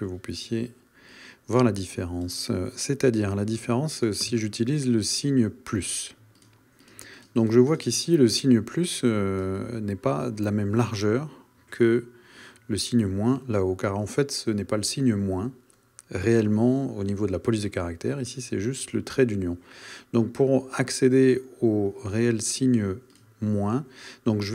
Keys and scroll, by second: 4.5 shift+=.